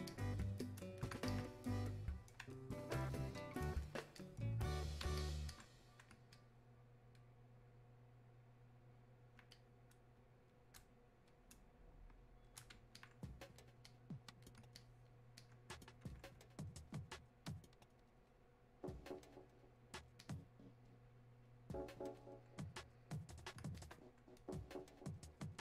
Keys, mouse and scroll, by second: 9.5-25.6 drag.